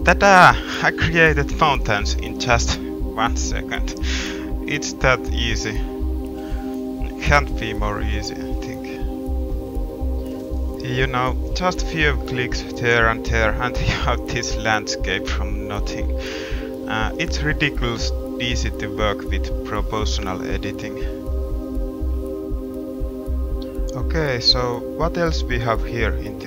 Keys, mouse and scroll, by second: 3.1 middle click, 3.6 middle click, 3.8 click, 4.0 middle click, 4.4-6.5 drag, 5.3 g, 6.5 middle click, 6.7 click, 7.0 middle click, 7.4 middle click, 8.2 click, 8.2 middle click, 8.9 click, 9.4 g, 9.6 click, 11.2 g, 12.1 middle click, 12.3 middle click, 13.2 g, 14.1 middle click, 14.4 middle click, 14.5 Tab, 18.2 middle click, 18.6 middle drag, 18.9-19.8 middle drag, 22.4 middle click, 22.7-24.9 middle drag, 25.9 middle click, 26.1-26.4 middle drag.